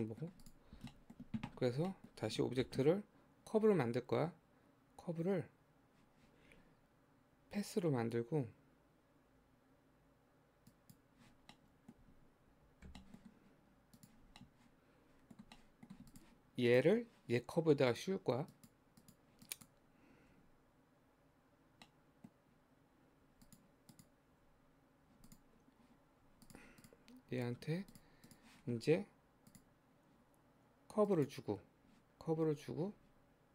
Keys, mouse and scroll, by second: 0.0 middle click, 0.4 click, 0.7 scroll down 1, 0.9-2.7 shift+middle drag, 2.7 shift+a, 11.6-12.9 middle drag, 12.9 g, 14.4-16.1 middle drag, 16.1 click, 16.7 click, 17.9 click, 18.5 click, 19.0 click, 20.3 Tab, 21.8 middle click, 22.4-23.3 scroll up 1, 23.3 Tab, 23.5 click, 23.9 click, 24.4 Tab, 25.3 click, 26.3 Tab, 26.5 click, 26.8 click, 27.3-27.9 scroll down 3, 27.9 click, 28.3 click, 31.2-32.5 drag, 32.5-33.5 scroll down 2.